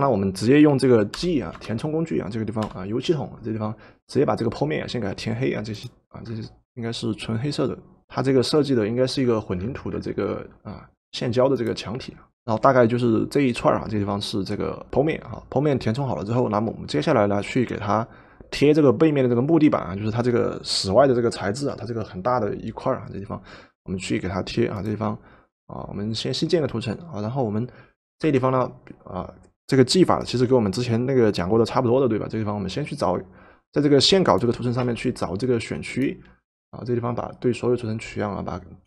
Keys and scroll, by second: 1.1 g, 2.6 g, 28.2 v, 34.9 w.